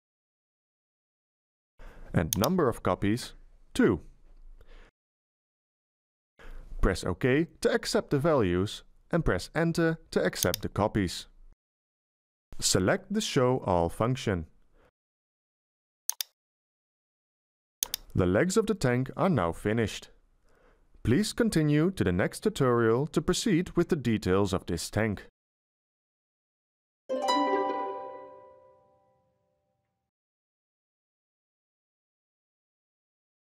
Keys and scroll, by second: 2.8 BackSpace, 5.1 2, 11.1 Return.